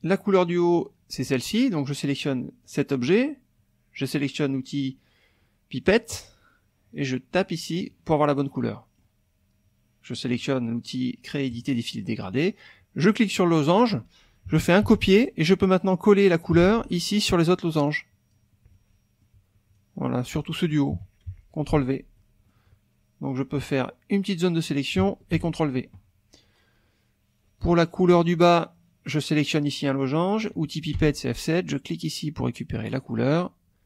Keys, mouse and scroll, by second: 0.0 click, 0.4 middle click, 2.6 click, 6.1 click, 7.8 click, 8.5 click, 11.5 click, 13.0 click, 13.4 click, 14.8 ctrl+c, 15.1 ctrl+middle click, 16.3 ctrl+click, 16.6 ctrl+v, 17.8 click, 18.7 click, 19.7 shift+click, 20.9 KP_Subtract, 21.7 ctrl+v, 22.1 ctrl+click, 23.4-24.9 drag, 25.4 ctrl+v, 28.2 click, 30.9 F7, 32.9 click.